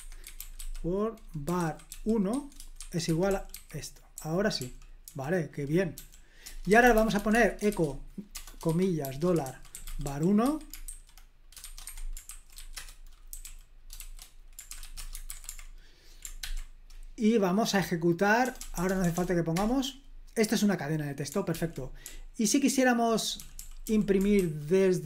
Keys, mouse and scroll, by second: 0.0-15.6 typing, 11.8 Escape, 16.4 ctrl+p, 18.4-19.1 typing, 19.5 Return, 21.5 super+l, 22.0-24.4 typing.